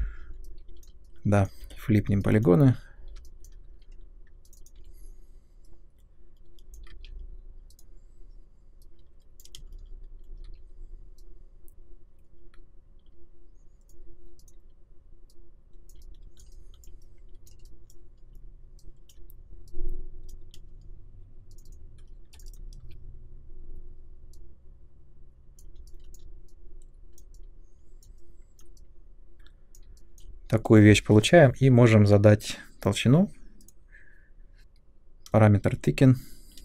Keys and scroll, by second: 1.6 f, 3.6 2, 4.7 r, 6.8 ctrl+z, 9.6 space, 10.4 w, 20.5 space, 22.2 3, 22.8 w.